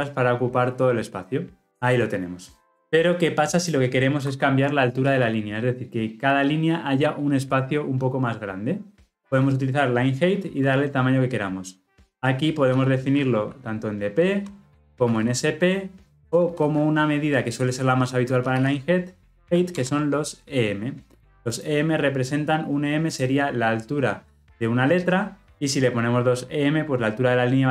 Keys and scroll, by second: 19.7 alt+Return.